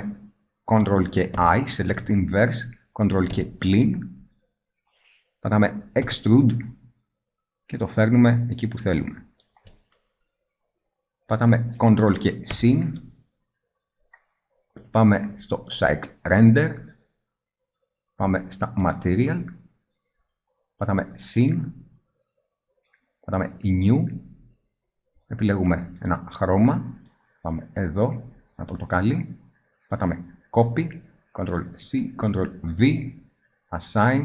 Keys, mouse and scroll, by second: 1.5 ctrl+i, 3.5 ctrl+KP_Subtract, 6.2 e, 12.7 ctrl+KP_Add, 17.7 middle click, 17.8-19.0 middle drag, 20.9 middle click, 21.6 click, 23.4 middle click, 25.0-26.2 middle drag, 27.4-30.7 middle drag, 30.7 ctrl+c, 32.4 ctrl+v.